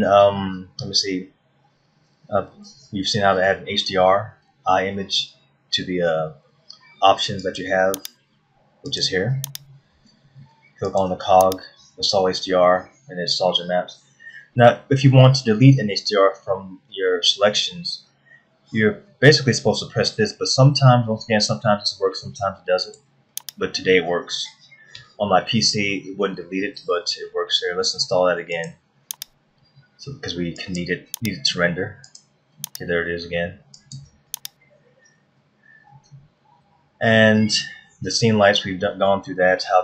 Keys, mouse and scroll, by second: 8.0 click, 9.5 click, 39.4-39.8 scroll down 2.